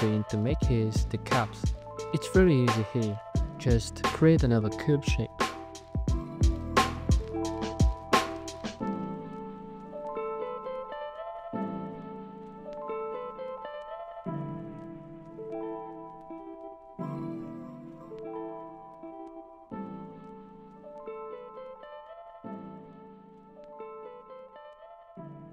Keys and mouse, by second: 1.6 shift+a, 3.4 s, 4.6 g, 4.6 z, 5.4 alt+z, 6.1 alt+z, 6.4 s, 7.0 g, 7.2 z, 8.2 s, 9.4 s, 9.7 a, 9.8 a, 11.1 click, 13.2 shift+click, 15.1 click, 16.4 w, 18.6 z, 21.9 KP_1, 21.9 KP_5, 22.2 KP_5, 22.5 alt+z.